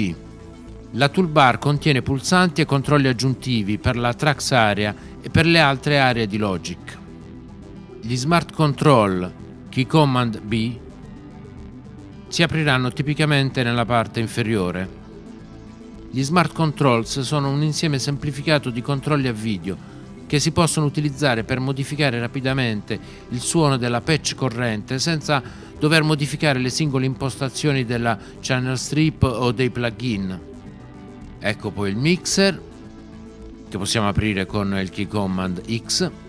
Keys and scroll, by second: 10.2 b, 35.6 x.